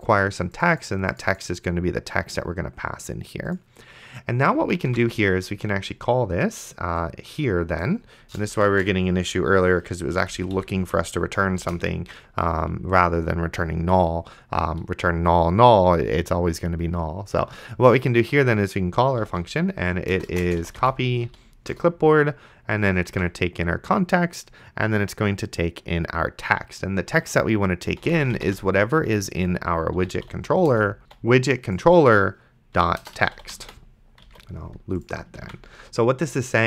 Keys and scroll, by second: 5.1 ctrl+s, 8.6-10.6 typing, 10.2 Delete, 11.9 shift+., 19.3-21.8 typing, 23.1 Tab, 27.8-31.0 typing, 32.5-34.1 typing, 34.5 alt+z, 35.7 ctrl+s.